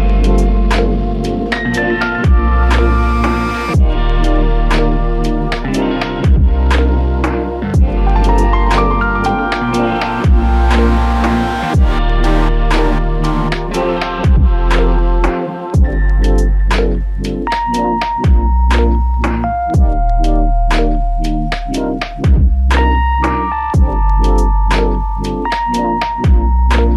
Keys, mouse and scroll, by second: 4.1 ctrl+scroll down 1.